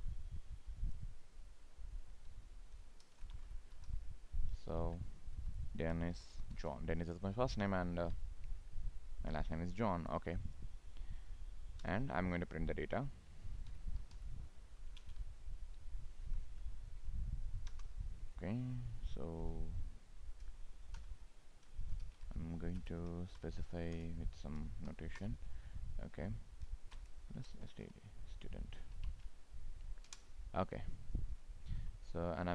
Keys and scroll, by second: 4.8 ctrl+Right, 8.2 ctrl+s, 14.9 ctrl+space, 29.3 ctrl+space, 31.6 ctrl+s.